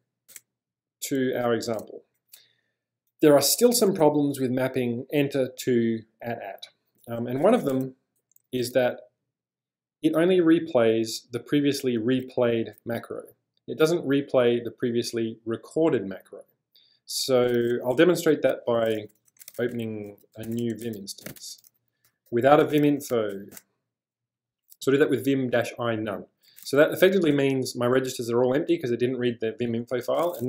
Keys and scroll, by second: 0.4 Return, 1.8 space, 2.9 o, 7.5 shift+;, 17.9 q, 18.0 Return, 19.2-24.7 typing, 26.4-27.6 typing, 30.0 Return.